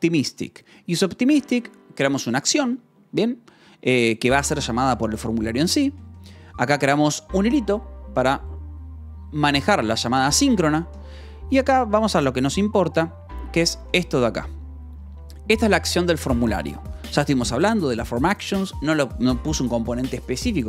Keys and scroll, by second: 0.6 j, 1.2 k, 1.6 j, 2.9 Escape, 3.1 k, 5.3 j, 5.9 Escape, 6.1 j, 7.1 shift+v, 10.1 Escape, 10.8 j, 11.4 k, 12.2 j, 13.8 k, 18.2 k.